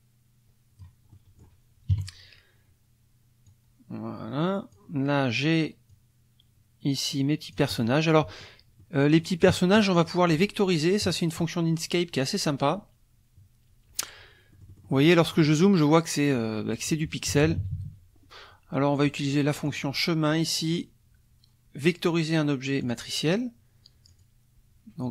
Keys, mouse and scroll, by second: 1.1 click, 1.9 KP_Subtract, 3.5-4.9 drag, 5.9-8.0 drag, 8.3 click, 8.8 click, 14.5 click, 15.3 click, 17.3 KP_Subtract, 19.7 click, 22.8 click, 24.1 click, 25.0 click.